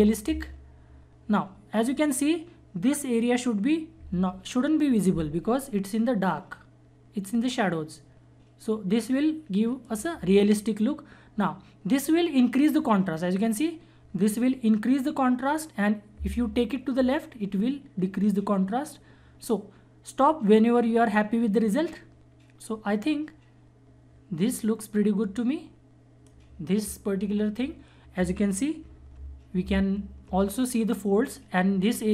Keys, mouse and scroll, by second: 6.5 click, 6.5-12.4 drag, 12.7-22.7 drag, 28.9 ctrl+Num_Lock, 29.7 ctrl+=.